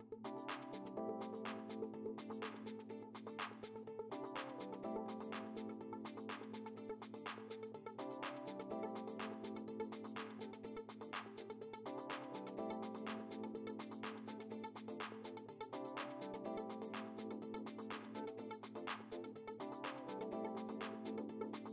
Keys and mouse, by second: 1.1 click, 3.3 space, 3.5 click, 5.0 click, 17.9 click.